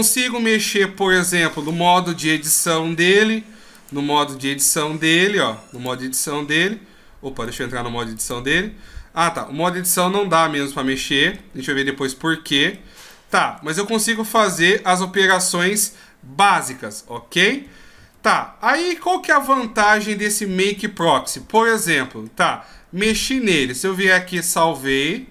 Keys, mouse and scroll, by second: 24.3 ctrl+q.